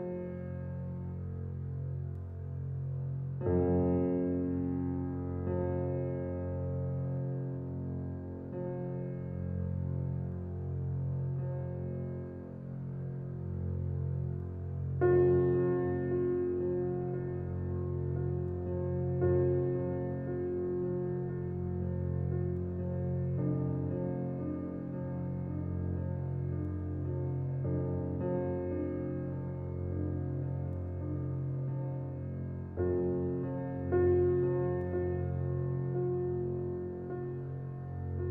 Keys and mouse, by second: 1.4 3, 2.1-3.7 alt+shift+drag, 3.5 Tab, 4.1 alt+click, 4.8 alt+click, 5.0 typing, 6.3 typing, 7.5-8.5 typing, 9.8 click, 11.0-12.3 alt+drag, 11.2-12.3 typing, 12.3 middle click, 12.9-14.1 alt+drag, 13.8-14.6 typing, 15.7 alt+middle click, 17.6 ctrl+alt+click, 18.2-19.0 ctrl+alt+drag, 19.0-22.0 alt+drag, 21.3-23.1 typing, 22.4 alt+shift+click, 25.1 click, 26.9 click, 27.9-28.6 typing, 28.6 shift+click, 33.2-33.9 typing, 33.4-34.3 drag, 35.7-37.6 drag, 37.6-38.3 typing.